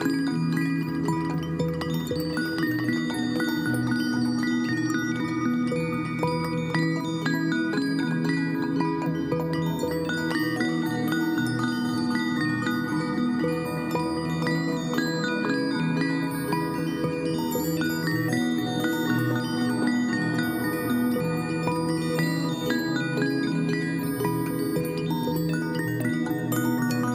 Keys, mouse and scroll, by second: 3.9 right click, 4.4 click, 10.6 right click, 20.8 Delete, 22.3 Delete, 22.5 ctrl+t.